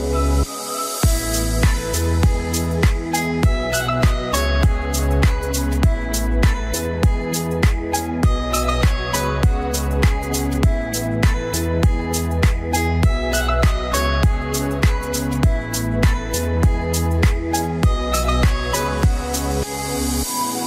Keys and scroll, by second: 9.4 ctrl+alt+shift+e, 13.6 ctrl+a, 16.5 ctrl+d.